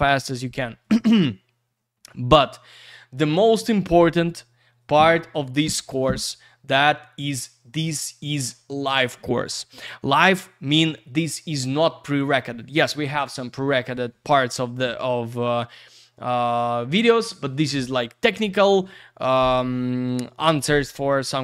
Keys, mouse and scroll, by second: 2.0 scroll down 1.